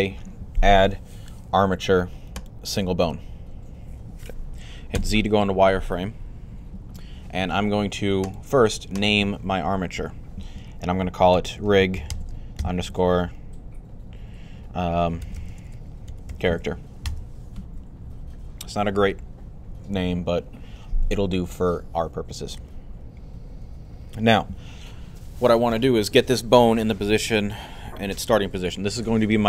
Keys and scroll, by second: 4.7 z, 11.1-12.8 typing, 14.7-16.8 typing.